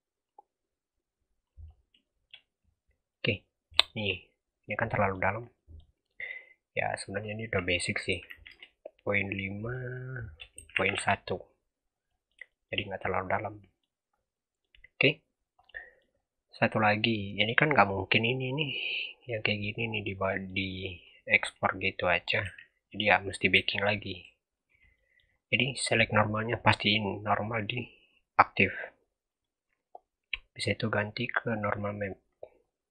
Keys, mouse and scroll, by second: 0.2 click, 1.6 scroll down 1, 1.9-2.3 shift+middle drag, 2.3-2.9 scroll up 3, 2.9 scroll down 1, 3.0 middle drag, 3.3-3.8 scroll up 4, 3.8 shift+middle drag, 4.0-4.6 scroll up 1, 4.6 middle click, 5.3 scroll down 3, 5.5 middle click, 6.2-6.9 scroll up 6, 6.9-11.8 drag, 11.8 scroll down 3, 12.0-12.7 middle drag, 12.7-13.2 scroll up 4, 13.2-14.0 middle drag, 14.0 scroll down 1, 14.2-14.9 middle drag, 14.9-15.4 scroll down 1, 15.4 scroll down 9, 15.7 middle click, 16.0-16.8 scroll up 5, 16.8 click, 17.2 scroll down 1, 17.5-20.5 middle drag, 20.5-22.1 scroll up 6, 22.1 scroll up 1, 22.3 h, 22.7 scroll down 3, 22.9 middle click, 23.4 g, 24.8 middle click, 25.2-25.5 scroll up 4, 25.6 click, 26.5 click, 27.1 click, 29.2 click, 32.2-32.5 scroll down 1, 32.5 scroll up 1.